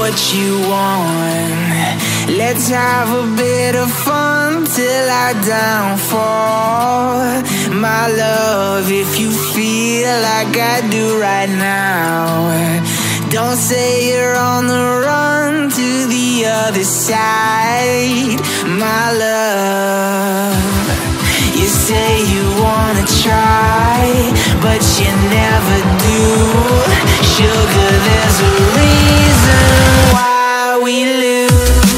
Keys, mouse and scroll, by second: 0.9 alt+scroll down 1, 2.5 ctrl+j, 7.1 ctrl+t, 9.5 ctrl+click, 10.0 ctrl+z, 11.3 ctrl+t, 11.5 right click, 13.9 right click, 15.3 ctrl+click, 17.7 right click, 19.2 right click, 19.8 right click, 20.0 ctrl+t, 20.1 right click, 23.2 ctrl+z, 25.3 ctrl+z, 25.4 ctrl+z, 29.0 alt+scroll down 1, 29.1 alt+scroll up 1.